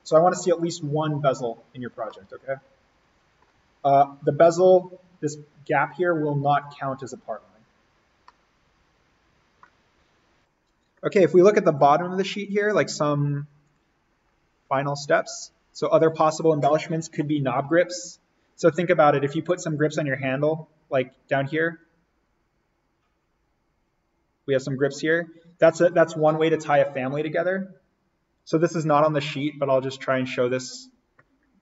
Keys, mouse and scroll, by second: 0.2-1.3 scroll down 1, 1.3 click, 2.1-3.9 middle drag, 3.9-5.5 scroll down 1, 5.5-6.0 scroll down 1, 8.2 scroll up 1, 8.3 middle click, 8.4 scroll, 9.9-10.4 scroll, 10.4 click, 14.1-14.5 scroll up 1, 19.5 scroll down 1, 24.7-25.1 scroll up 1, 29.1 click, 30.3 click, 31.4 scroll up 1.